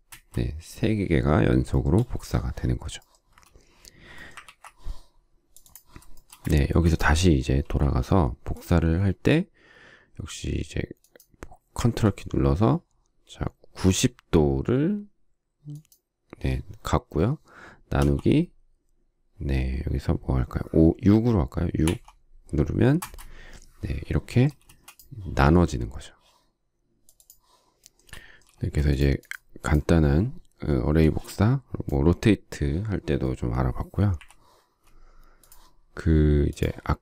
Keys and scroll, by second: 0.1 Return, 4.4 ctrl+z, 6.5 space, 7.6 q, 21.8 6, 22.9 shift+Return, 24.6 space, 28.4 shift+space, 34.0 Delete.